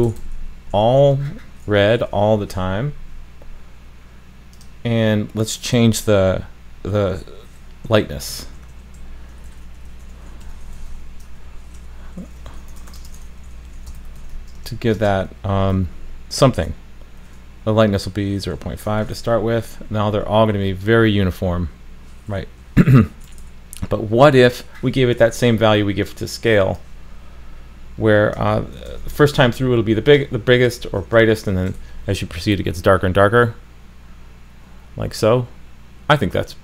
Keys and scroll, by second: 19.9 super+s, 28.9 super+c, 30.8 super+v, 31.8 super+s.